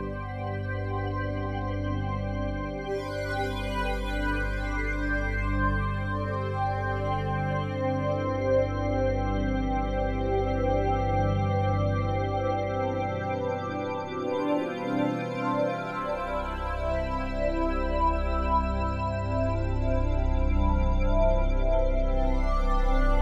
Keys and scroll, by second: 8.5 [.